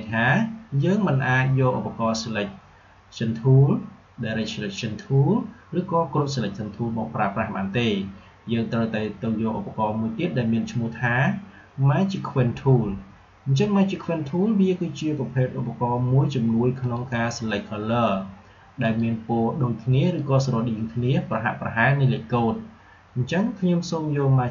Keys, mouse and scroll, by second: 16.7 click.